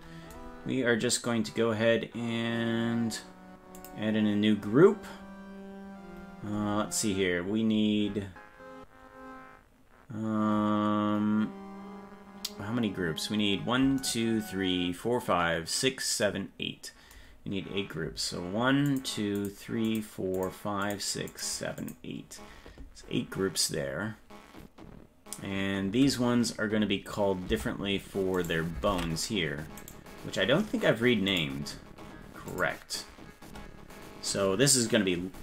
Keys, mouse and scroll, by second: 3.7 click, 6.2-6.9 scroll down 9, 7.1 scroll up 4, 9.1-9.5 scroll up 3, 18.8 click, 19.3 click, 19.8 click, 20.3 click, 20.8 click, 21.3 click, 21.8 click, 27.5 Tab, 28.4 right click, 28.9 ctrl+Tab, 29.8 right click, 31.3 click, 32.5-35.4 drag.